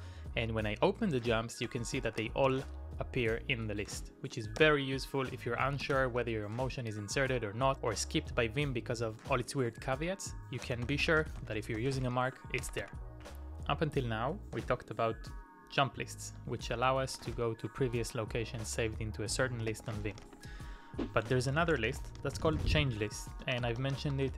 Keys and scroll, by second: 0.0-3.0 typing, 4.3-5.9 typing, 8.2-8.9 typing, 10.7-11.6 typing, 12.7 typing, 17.1 typing, 18.8-24.1 typing.